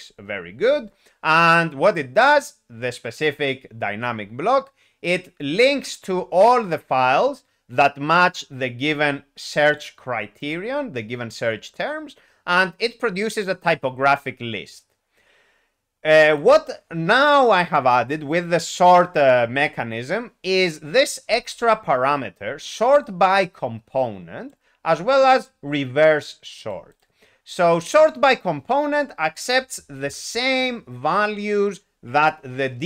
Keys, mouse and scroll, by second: 9.7 click, 10.5 click, 24.4 click, 26.6 click, 26.9 click, 27.9 double click, 30.0 s.